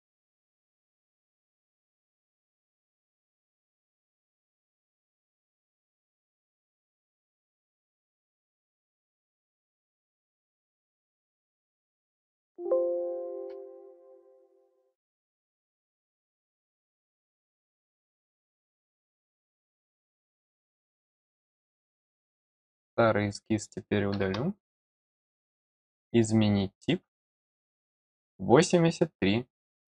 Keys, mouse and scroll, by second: 1.0 click, 1.5 click, 2.3 click, 3.0 click, 3.4 middle click, 4.4 middle click, 4.9-5.4 scroll down 2, 7.1 click, 11.4 click, 12.4 click, 13.8 click, 18.9 click, 20.4 click, 22.0 middle click, 22.8 click, 25.6 click.